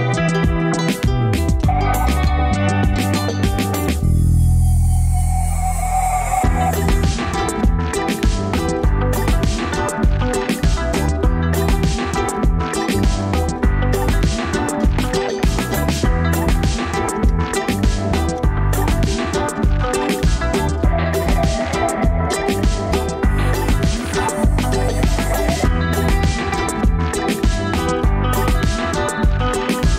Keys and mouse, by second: 1.3-4.7 middle drag, 9.3 Tab, 11.3-12.2 middle drag, 12.7-15.3 middle drag, 16.1-20.4 middle drag, 21.5 Tab, 23.9-24.5 middle drag, 24.6 Tab, 25.5 alt+z, 26.1-28.6 middle drag.